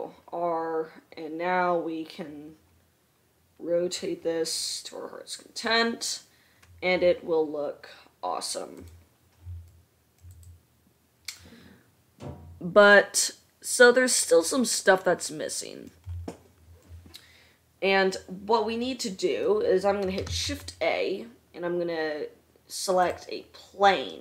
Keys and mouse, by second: 3.8-4.3 middle drag, 4.6-10.5 middle drag, 10.5 click, 10.9-17.6 middle drag, 20.5 shift+a.